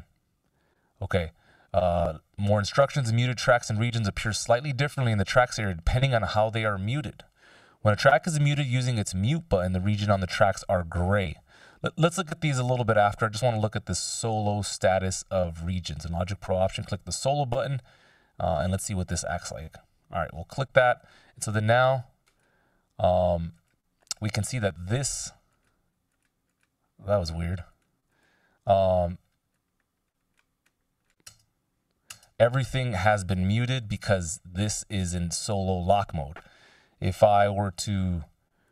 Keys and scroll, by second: 31.7 space.